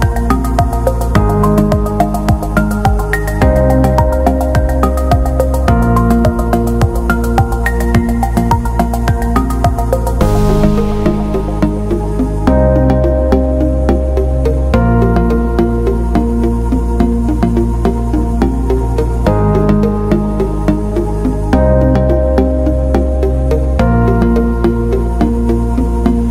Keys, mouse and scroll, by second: 1.4 click, 5.4 alt+shift+click, 8.2 click, 9.2 alt+scroll up 1, 10.1 scroll up 1, 10.2 click, 11.4 t, 12.0 click, 13.5 click, 16.0 click, 18.5 click, 20.4 click, 21.2-22.2 scroll down 1, 22.6 click, 23.1 click, 23.5 click, 24.1 click.